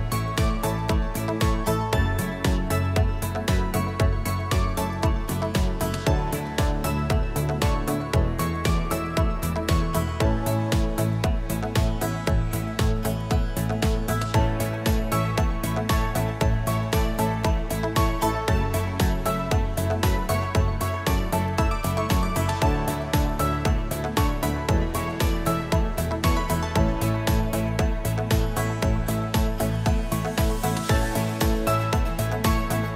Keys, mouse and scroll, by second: 0.5 click, 1.3 click, 1.4 click, 3.3 click, 4.5 click, 6.3 scroll, 8.5 click, 9.0 F1, 9.5 click, 10.4 -, 10.5-11.6 -, 12.4 click, 13.2 ctrl+d, 14.1 shift+click, 15.0 ctrl+-, 16.3 click, 17.0 ctrl+d, 18.1 shift+click, 19.1 ctrl+-, 20.4 click, 21.3 ctrl+d, 22.6 shift+click, 23.7 ctrl+-, 25.0 click, 25.7 ctrl+d, 26.3 shift+click, 27.1 ctrl+-, 28.4 click, 29.1 ctrl+d, 29.7 shift+click, 30.7 ctrl+-, 32.2 click.